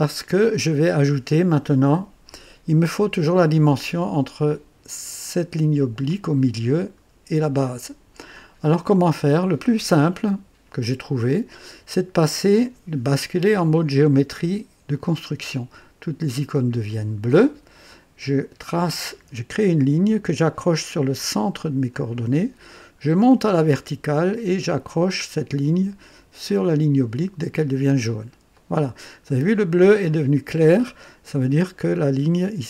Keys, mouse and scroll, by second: 14.9 click, 18.8 click, 21.9 click, 27.5 click, 28.5 right click.